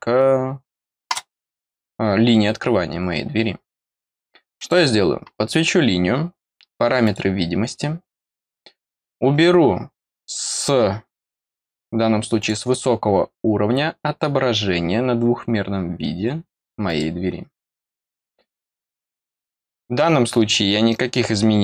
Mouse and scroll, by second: 1.1 click, 4.5 click, 7.0 click, 12.3 click, 16.8 click, 18.4 click, 19.0 click.